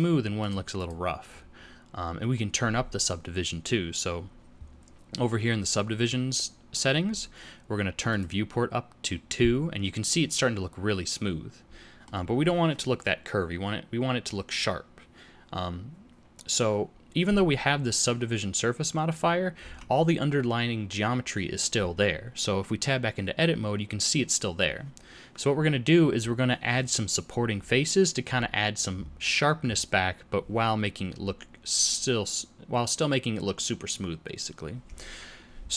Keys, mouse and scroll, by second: 0.3 click, 0.7 click, 8.1 click, 10.0 middle click, 19.5 Tab.